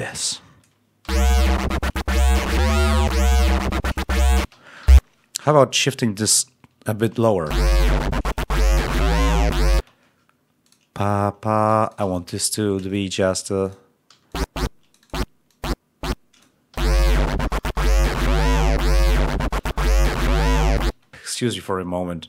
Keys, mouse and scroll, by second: 0.1 click, 0.9 l, 2.4-3.0 ctrl+scroll down 2, 4.3 space, 6.2 shift+Down, 7.3 shift+l, 9.6 space, 10.5 click, 11.6 g, 11.7 shift+click, 12.0 shift+right click, 12.8 ctrl+shift+right click, 13.2 ctrl+shift+scroll up 1, 13.5 ctrl+click, 14.0 ctrl+e, 14.2 ctrl+click, 15.4-16.5 drag, 16.6 l, 20.8 space.